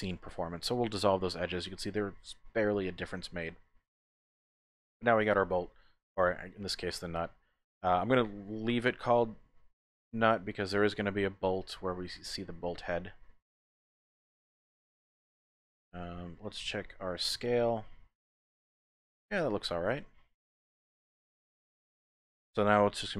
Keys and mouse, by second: 1.7-3.7 drag, 3.9 Tab, 4.5 middle click, 7.0-8.2 middle drag, 10.5-11.8 middle drag, 12.5-13.7 middle drag, 13.9 shift+middle click, 15.0 middle click, 16.0 KP_1, 17.1 shift+middle click, 19.5 shift+click.